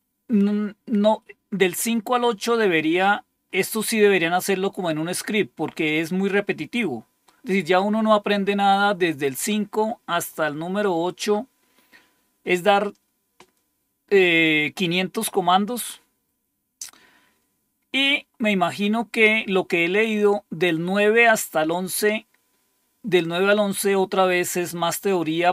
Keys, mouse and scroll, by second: 1.9-3.6 scroll down 4, 3.9-6.9 scroll up 3, 9.7-12.1 scroll down 3, 12.1 scroll down 1, 16.7-19.6 scroll down 4, 21.7-22.4 scroll down 2.